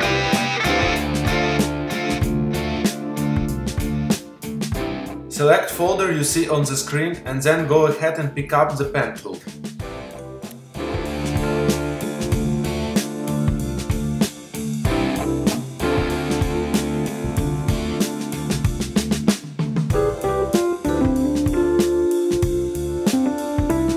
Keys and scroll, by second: 8.3 z, 10.7 space.